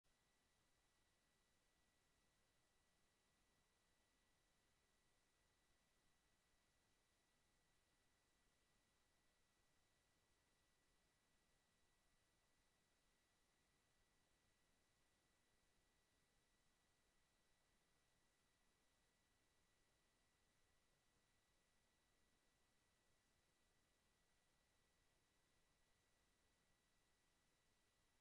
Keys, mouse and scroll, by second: 3.4 click, 6.2 click, 11.5 click, 13.5 click, 16.3 click, 18.4 KP_1, 19.6 click, 20.5 click, 21.7 KP_Decimal, 22.3 KP_3, 22.8 KP_Enter, 24.5 click, 25.5 click, 27.5 click.